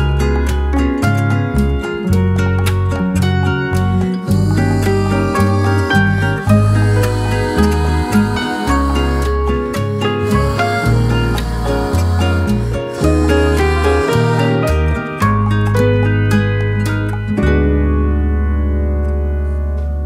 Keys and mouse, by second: 5.2-5.5 middle drag, 6.0 shift+middle drag, 6.5 middle click, 7.1 shift+middle click, 7.7 middle click, 8.1 shift+middle click, 10.1 k, 15.5 k.